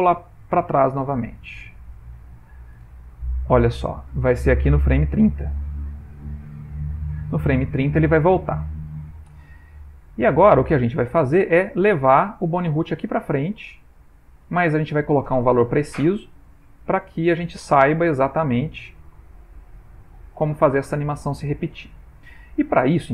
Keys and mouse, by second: 0.5 Right, 0.7 Right, 1.1 Right, 1.3 Right, 1.6 Right, 1.8 Right, 2.1 Right, 2.3 Right, 2.6 Right, 2.8 Right, 5.3 Right, 5.3 Left, 6.0 Left, 6.9 Right, 8.2 Left, 10.1 middle click, 10.9 shift+middle click, 12.4 g, 15.1 middle click, 15.9 ctrl+middle click, 16.6 ctrl+middle click, 20.2 click, 21.9 ctrl+middle click, 22.6 middle click.